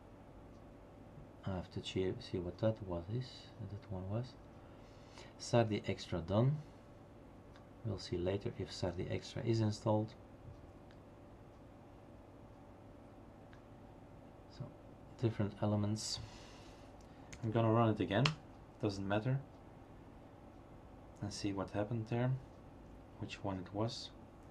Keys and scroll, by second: 17.3 Up.